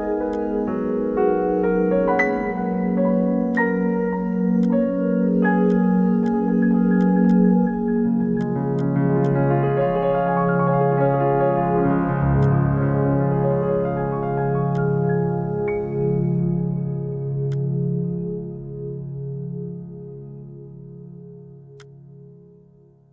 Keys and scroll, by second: 10.2 1, 11.3-12.1 typing.